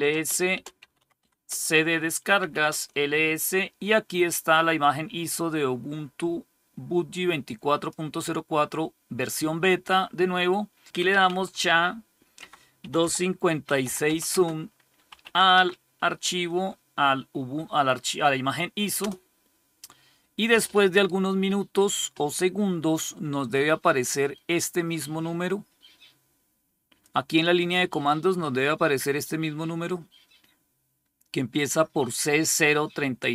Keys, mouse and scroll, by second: 0.0-2.8 typing, 1.4 Return, 5.4-8.4 drag, 10.6-15.7 typing, 18.8 Return, 24.0-26.9 drag.